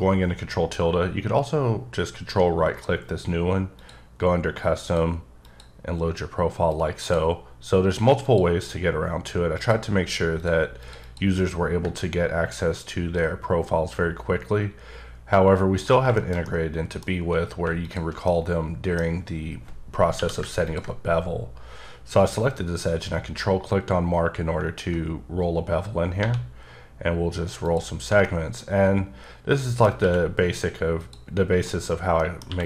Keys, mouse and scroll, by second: 2.3 ctrl+right click, 3.7 click, 4.8 click, 5.4 click, 6.7 click, 8.2 click, 9.5 click, 10.4 click, 10.8 click, 11.0 double click, 11.6 scroll down 1, 12.8 ctrl+click, 16.1 shift+middle click, 16.2 shift+scroll down 2, 16.4 middle click, 17.8 alt+click, 18.2 middle click, 19.0 scroll up 2, 20.1 q, 20.6 ctrl+click, 24.6 ctrl+click, 25.2-26.2 scroll up 4, 26.2 1, 26.7-27.1 scroll up 3, 27.6 click, 27.9 scroll down 2, 28.2 middle click, 30.0 q, 31.0 click, 31.6 middle click, 32.1 middle click, 32.4 q.